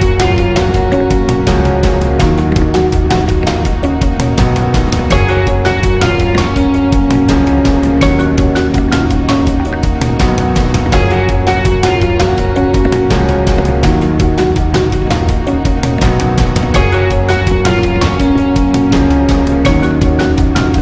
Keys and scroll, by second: 0.3 ctrl+alt+õ, 0.5 alt+shift+æ, 0.7 alt+shift+ú, 0.8 alt+shift+õ, 1.3 alt+shift+ß, 1.7 alt+shift+ù, 2.0 alt+shift+ä, 2.3 alt+shift+è, 2.5 alt+shift+´, 2.8 alt+shift+è, 2.9 alt+shift+ü, 3.1 alt+shift+ù, 3.2 alt+shift+´, 3.4 alt+shift+è, 3.9 alt+shift+ý, 4.1 alt+shift+è, 4.6 alt+shift+à, 4.7 alt+shift+ù, 5.1 alt+shift+é, 5.7 alt+shift+ø, 5.9 alt+shift+ù, 6.1 alt+shift+ī, 6.3 alt+shift+´, 7.0 alt+shift+æ, 7.1 alt+shift+ä, 7.5 alt+shift+ì, 7.8 alt+shift+´, 8.1 alt+shift+õ, 8.5 alt+shift+ø, 8.8 alt+shift+´, 9.9 alt+shift+ç, 10.1 alt+shift+ã, 11.0 alt+shift+´, 11.4 alt+shift+ç, 11.7 alt+shift+è, 11.9 alt+shift+æ, 12.2 alt+shift+è, 12.4 alt+shift+ù, 12.6 alt+shift+ø, 12.9 alt+shift+´, 13.1 alt+shift+è, 13.3 alt+shift+ã, 13.6 alt+shift+´, 13.9 alt+shift+æ, 14.1 alt+shift+ù, 14.4 alt+shift+ä, 14.7 alt+shift+æ, 14.9 alt+shift+ù, 15.1 alt+shift+ī, 15.5 alt+shift+â, 15.7 alt+shift+è, 15.9 alt+shift+´, 16.2 alt+shift+è, 16.4 alt+shift+ü, 16.6 alt+shift+´, 17.1 alt+shift+ä, 17.3 alt+shift+õ, 17.5 alt+shift+ß, 17.7 alt+shift+ý, 17.8 alt+shift+ç, 17.9 alt+shift+è, 18.1 alt+shift+õ, 18.3 alt+shift+â, 19.8 super+æ, 20.2 alt+shift+ã, 20.4 alt+shift+â, 20.6 alt+shift+´.